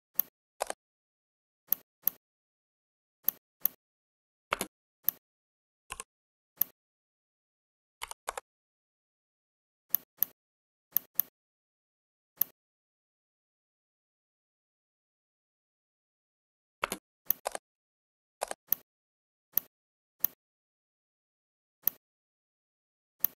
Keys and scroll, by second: 4.4 space, 7.9 5, 8.3 Return, 16.8 space.